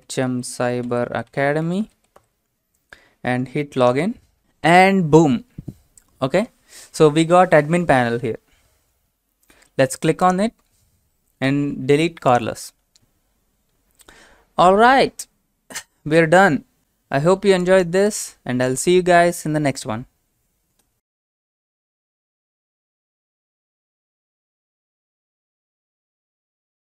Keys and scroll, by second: 0.0-3.9 typing.